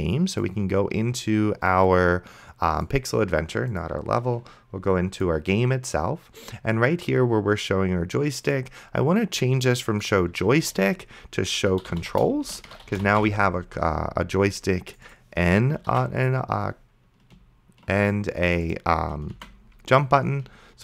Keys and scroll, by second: 4.4 ctrl+w, 11.6-13.7 typing, 16.2 ctrl+d, 19.6 ctrl+c.